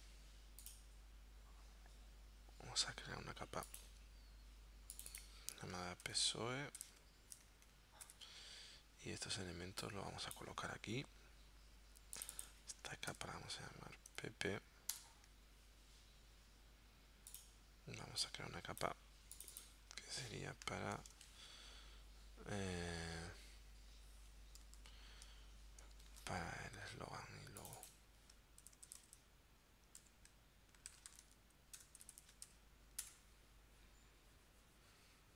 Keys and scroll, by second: 6.2 shift+s, 6.8 shift+o, 6.9 shift+e, 8.1 Return, 13.1 shift+p, 14.1 shift+p, 14.9 Return, 21.3 super+º, 24.6 super+Tab, 26.1 super+Tab, 28.6-32.5 typing, 33.0 Return.